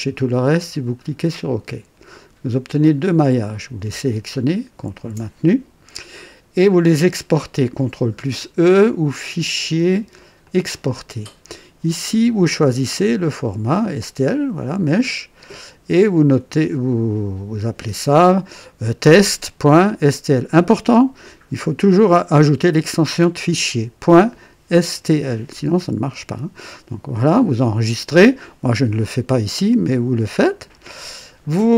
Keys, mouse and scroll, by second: 0.9 click, 2.8 click, 4.8 ctrl+click, 9.2 click, 10.4 click, 12.9 click, 15.3 click, 30.3 click.